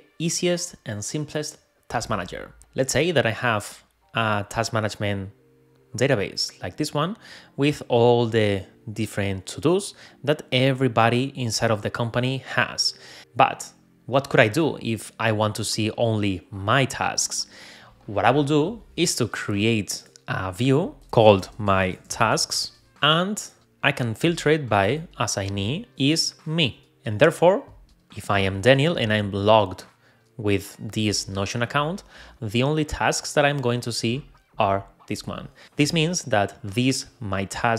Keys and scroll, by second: 21.1 super+a, 22.5 Return.